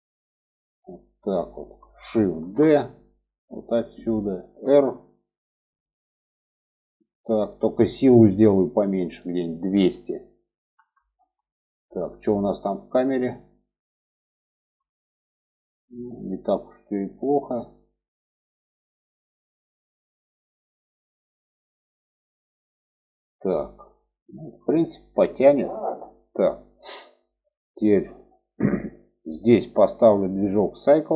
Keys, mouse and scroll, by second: 0.6-1.8 drag, 2.8 shift+d, 5.0 r, 9.6-11.9 drag, 11.3 0, 13.0 click, 15.8-16.2 shift+middle drag, 24.6-25.1 shift+middle drag, 28.7 click, 29.9-31.1 drag.